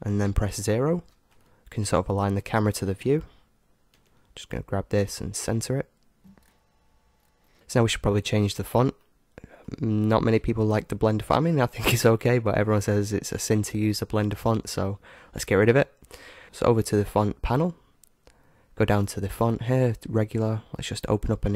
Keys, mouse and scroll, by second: 0.9 ctrl+alt+KP_0, 2.8-5.2 right drag, 3.9 g, 6.4 g, 7.5-9.0 right drag, 9.0-10.9 middle drag, 13.2-15.8 drag, 15.1-17.8 middle drag, 17.9-20.0 middle drag, 21.3 click.